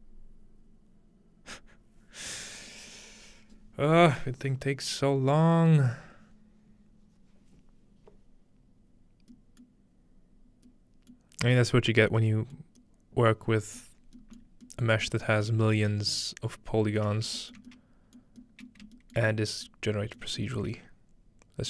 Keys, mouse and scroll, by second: 9.6-10.7 middle drag, 11.1-12.2 middle drag, 12.3-13.8 scroll up 1, 12.6 middle drag, 13.8-14.2 middle drag, 14.0-15.9 scroll down 2, 14.5 middle click, 14.9 shift+middle click, 15.3 shift+middle click, 15.9 shift+middle click, 16.0-17.0 scroll up 2, 17.0-17.4 scroll up 1, 17.1 shift+middle click, 17.6 shift+middle click, 18.8 shift+middle click, 19.2 shift+middle click, 19.7 shift+middle click.